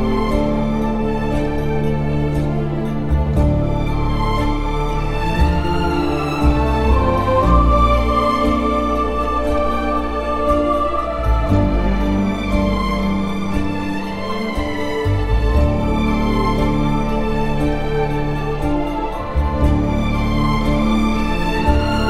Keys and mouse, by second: 12.1 shift+middle click, 12.9 Tab, 13.5 Tab, 15.4 click, 15.9 1, 16.3 alt+z, 16.8 q, 18.1 alt+z, 19.2 Tab, 19.8 Tab, 20.0 2, 21.8 ctrl+x.